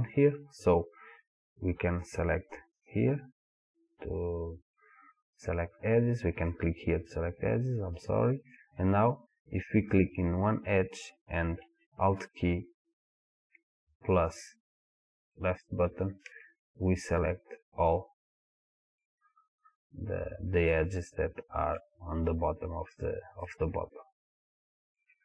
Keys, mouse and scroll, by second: 2.8 click, 6.5-10.0 middle drag, 10.0 click, 15.6-19.8 alt+drag, 20.7-25.2 middle drag.